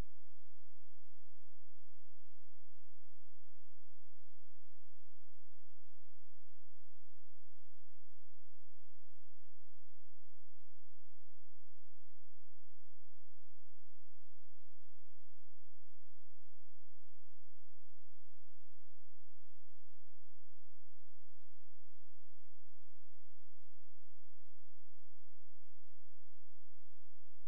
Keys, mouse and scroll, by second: 1.8 click, 6.8 Escape, 10.4 click, 13.0 click, 19.0 Escape, 22.2 click, 27.4 F10.